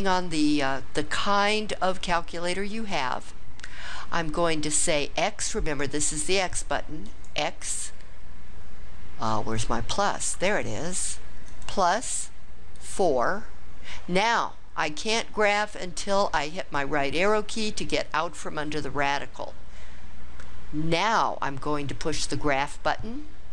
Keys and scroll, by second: 12.7 4, 17.2 ).